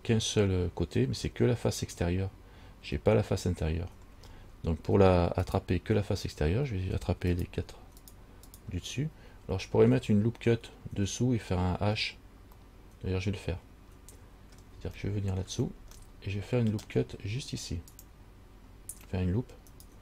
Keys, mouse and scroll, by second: 5.7 right click, 7.5 shift+right click, 8.2 shift+right click, 8.7 right click, 12.8 middle click, 14.7 scroll down 1, 15.1 shift+scroll up 1, 15.2 shift+middle click, 15.7 shift+scroll down 1, 16.2 middle click, 16.9 scroll down 1, 18.1 click, 19.9 alt+right click.